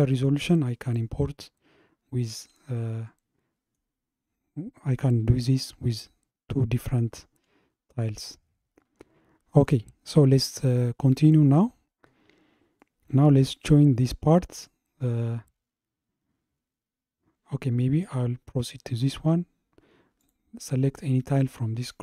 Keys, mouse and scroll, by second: 1.1 scroll up 1, 1.7 scroll up 1, 1.7-3.1 scroll down 1, 3.1-8.3 shift+middle drag, 8.4-8.8 scroll down 3, 8.5 middle click, 9.7-12.7 middle drag, 12.9-15.9 middle drag, 20.2 click.